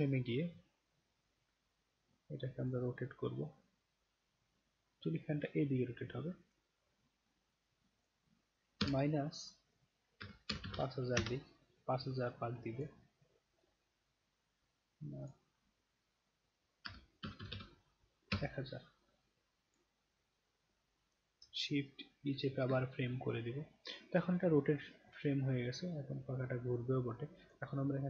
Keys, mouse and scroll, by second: 2.6 click, 3.6-6.5 drag, 8.0 click, 12.7 click, 15.2 click, 22.2 shift+e, 23.8 click, 25.1-27.5 drag.